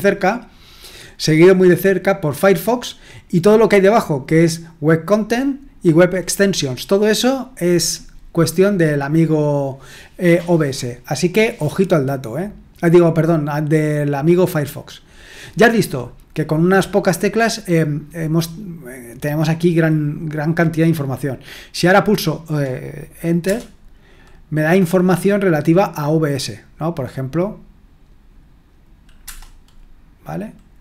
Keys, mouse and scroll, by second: 23.4 Return, 29.2 Return.